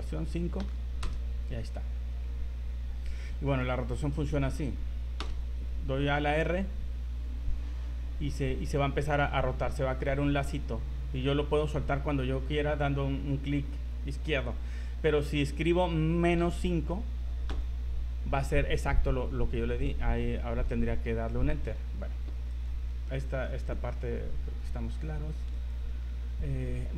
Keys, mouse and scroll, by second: 3.5 right click, 5.2 r, 22.6 right click, 23.2 shift+middle click, 24.0 scroll up 3, 25.7 right click, 26.1 z, 26.9 z.